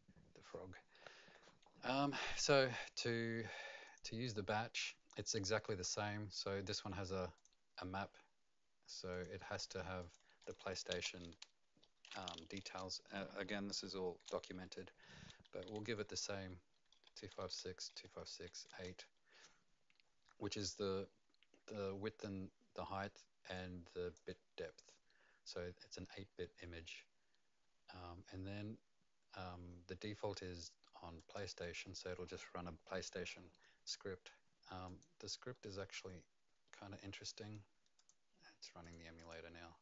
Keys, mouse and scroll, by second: 0.9 middle click, 1.9 right click, 3.8 click, 7.3 click, 9.1 click, 10.4 click, 10.9 space, 11.8 shift+1, 12.6 BackSpace, 15.8-18.3 typing, 18.6 KP_Enter, 23.5 click, 31.2 click, 34.8 click, 37.9 click, 38.8 click, 39.2 click.